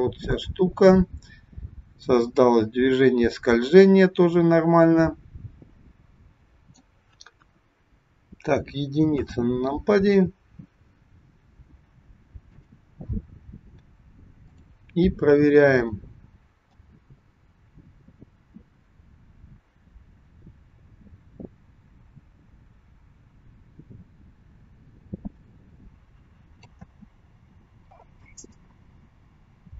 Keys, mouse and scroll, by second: 7.5 KP_1, 9.1 KP_1, 14.5 click, 16.8 click, 27.0 space.